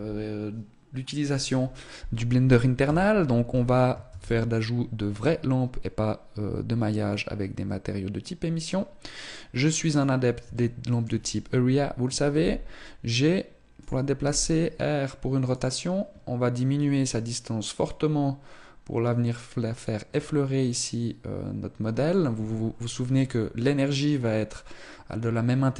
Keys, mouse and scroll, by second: 2.7 KP_3, 3.9 shift+a, 10.3 shift+middle click, 12.1 g, 14.1 r, 16.6 click.